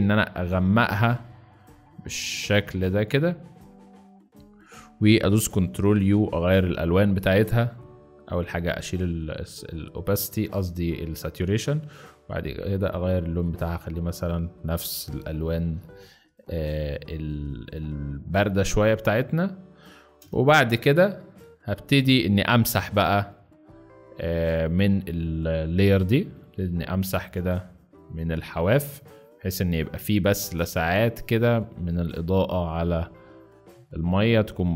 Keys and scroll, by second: 5.8 ctrl+u, 15.4 ctrl+t, 20.1 shift+Return, 22.6 b, 25.6 b, 27.1 x.